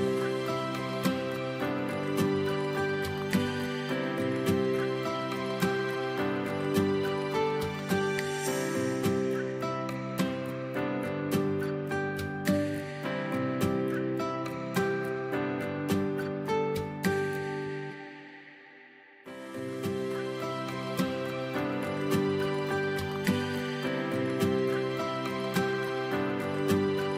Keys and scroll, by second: 0.7 Delete, 3.7 Delete, 6.0 space, 13.1 space, 16.0 o, 25.4 v.